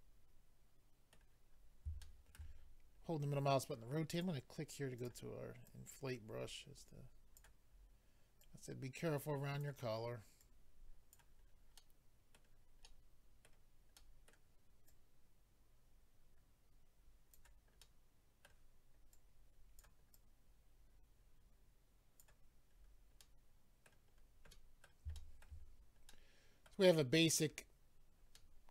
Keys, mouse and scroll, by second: 1.5-2.0 scroll up 2, 2.0 shift+middle click, 2.3 middle click, 2.5-2.9 scroll up 5, 4.1 click, 4.2 click, 5.0 click, 5.0 click, 5.6 click, 7.7 scroll up 2, 8.4 click, 10.4 click, 11.4-11.8 scroll down 2, 11.8 middle click, 12.8 middle click, 14.0 middle click, 17.3 click, 17.8 middle click, 19.1 click, 20.1 click, 22.7-23.2 scroll down 4, 23.2 middle click, 24.1-24.4 scroll down 2, 24.5 middle click, 25.1 shift+middle click, 25.6 middle click, 25.6-26.6 scroll down 3, 26.1 middle click, 26.9-27.9 scroll up 2, 28.3 middle click.